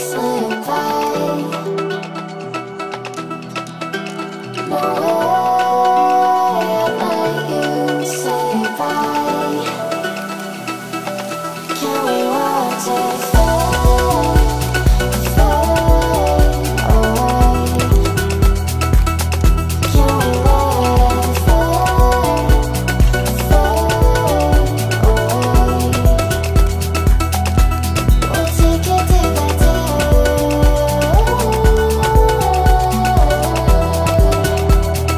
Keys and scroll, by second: 9.2 Escape, 24.6 Escape.